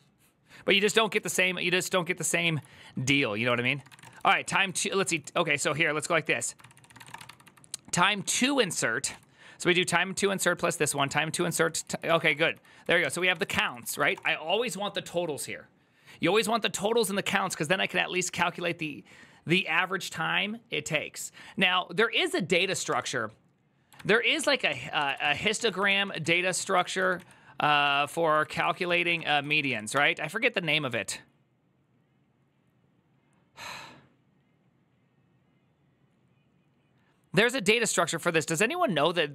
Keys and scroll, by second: 2.3 alt+{, 3.3 ctrl+c, 3.4-14.3 typing, 6.4 ctrl+c, 6.5 ctrl+c, 23.6-29.9 typing, 24.5 ctrl+t.